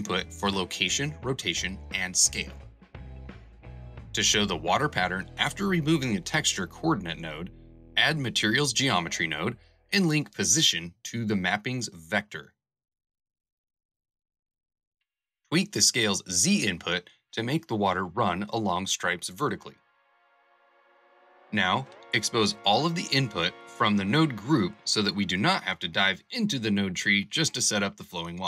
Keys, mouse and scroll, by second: 14.1 Return, 21.1 KP_0, 21.3 KP_Decimal.